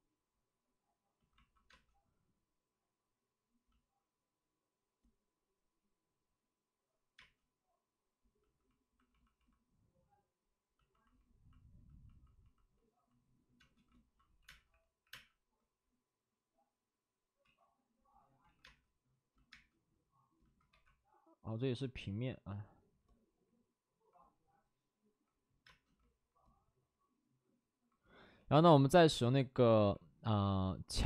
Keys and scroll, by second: 7.1 space, 13.5-15.0 typing, 17.3 ctrl+z, 18.5 ctrl+z, 18.5 space, 20.3 space, 20.6 2, 25.6 space, 29.7 b.